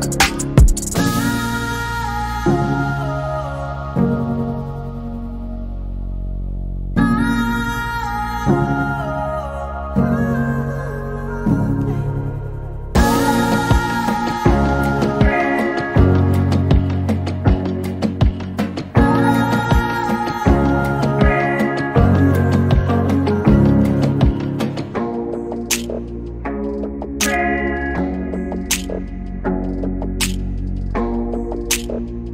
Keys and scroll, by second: 23.1 c, 24.3 s.